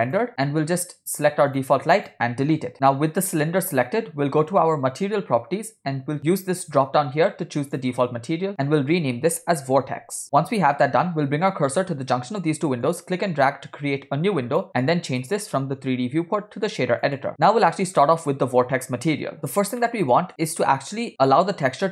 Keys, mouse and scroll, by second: 0.4 click, 1.7 click, 2.2 click, 5.1 click, 6.7-8.0 drag, 8.6-10.3 shift+drag, 12.9-14.6 drag, 15.2-16.3 drag, 16.9 click, 17.4 middle click, 18.2 scroll up 3, 19.7 scroll down 1, 20.0 middle click.